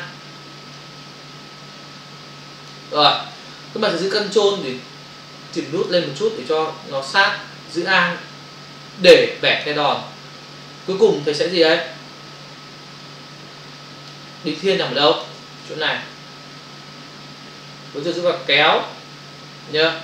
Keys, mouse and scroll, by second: 0.8 alt+click, 4.7 ctrl+click, 7.8 alt+click, 10.8 space, 10.9 click, 11.1 space, 13.1 alt+click, 14.7 space, 18.4 click, 19.8 space.